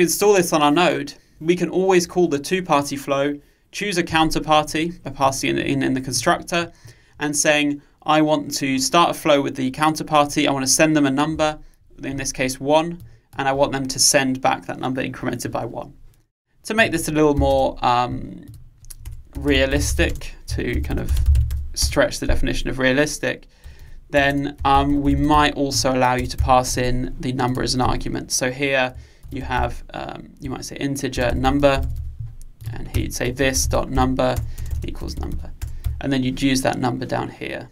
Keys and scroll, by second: 30.6 Return.